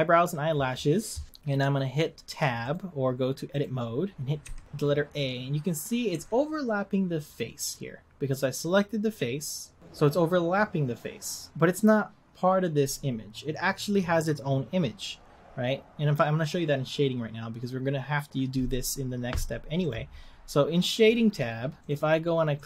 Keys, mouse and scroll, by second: 3.6 click, 4.4 a, 6.1 a, 19.9 click, 20.7-22.0 scroll up 15, 22.0 click.